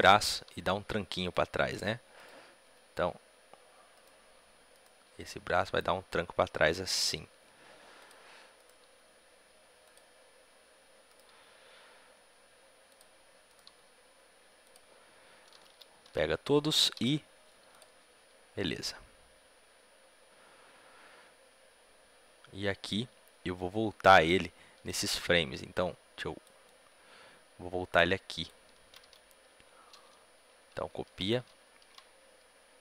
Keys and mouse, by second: 0.3 r, 2.0-3.8 right drag, 2.5 r, 4.6-7.4 right drag, 5.0 r, 8.5-9.7 drag, 8.5-12.8 right drag, 8.7 r, 11.0 click, 11.2 r, 13.4-17.6 drag, 13.4-14.5 right drag, 13.6 r, 15.6 a, 15.9 a, 17.6 i, 18.6-20.3 drag, 25.7-28.8 drag, 25.7 a, 28.8 a, 29.0 a, 32.7 ctrl+c, 32.7-32.8 drag.